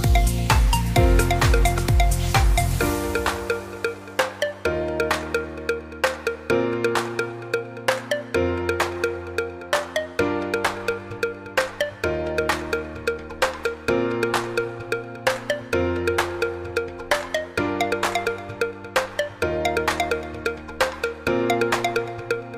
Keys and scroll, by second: 2.3-3.2 typing, 6.9-7.8 typing.